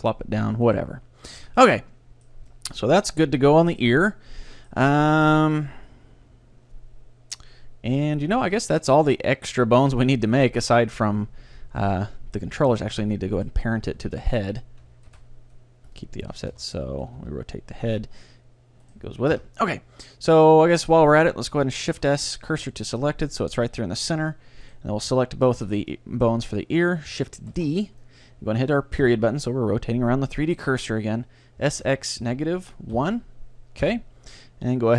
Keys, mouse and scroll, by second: 0.8-2.6 right drag, 1.5 a, 1.7-7.4 middle drag, 8.8-13.0 middle drag, 13.5-14.8 middle drag, 13.5-16.0 right drag, 13.7 Tab, 15.1 ctrl+p, 16.3 a, 16.6 Tab, 16.8-18.6 right drag, 17.1 r, 19.0-22.9 right drag, 19.4 KP_1, 22.0 shift+s, 23.7 Tab, 24.7-27.5 right drag, 26.0-27.5 drag, 27.5 middle click, 27.6 shift+d, 28.1-30.1 drag, 29.1 ., 31.7 s.